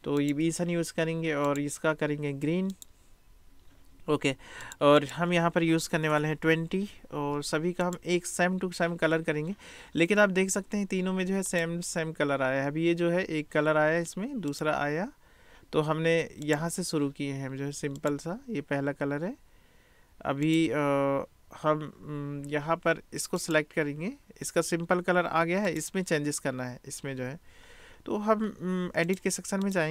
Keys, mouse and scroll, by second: 5.0-8.0 drag, 6.1 BackSpace, 11.6 click, 14.5 click, 16.5 click, 18.0 click, 20.5 click, 23.4 click, 25.7 click, 29.1-29.8 drag.